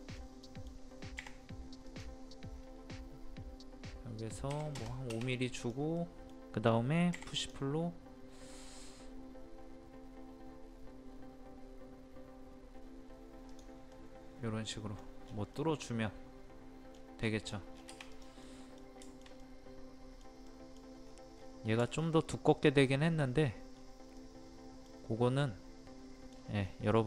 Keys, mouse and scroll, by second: 0.4-1.5 middle drag, 1.5 o, 1.8 click, 4.5 KP_5, 5.5 KP_5, 5.6 click, 6.0 middle click, 7.2 p, 7.4 click, 13.9 middle click, 14.9 scroll down 1, 15.3 scroll up 1, 15.5 middle click, 16.9 scroll down 1, 17.2 scroll up 1, 17.4 scroll down 1, 18.1 click, 18.4 middle click, 18.8 scroll down 1, 19.0 shift+middle click, 19.4 middle click, 20.5 middle click, 21.0-21.3 scroll up 1, 21.8 shift+middle click, 23.4 scroll up 1, 24.2 middle click, 25.4 middle click, 26.3 scroll down 1, 26.9 middle click.